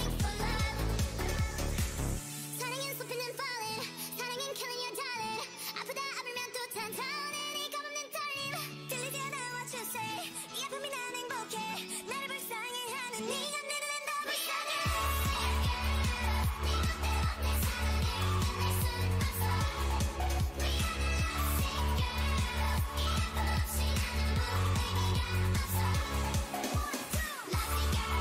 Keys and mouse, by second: 5.3 ctrl+r, 7.0 a, 7.6-10.2 drag, 8.1 o, 8.5 g, 11.7 click, 12.2 z, 12.7 click, 13.3 g, 14.2 z, 14.7 click, 15.3 click, 16.6 g, 18.9 middle click, 20.4-22.1 right drag, 20.6 g, 22.1-23.7 drag, 22.2 g, 23.3 g, 24.4 g, 24.9 a, 25.1 click.